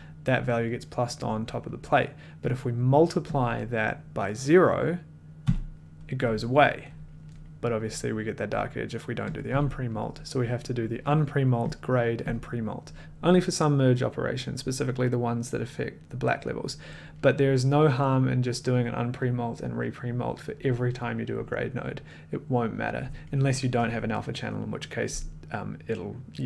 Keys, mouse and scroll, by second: 2.5 click, 3.3 click, 5.4 d, 9.3 click, 9.5 d, 11.4 click, 11.9 click, 12.5 click.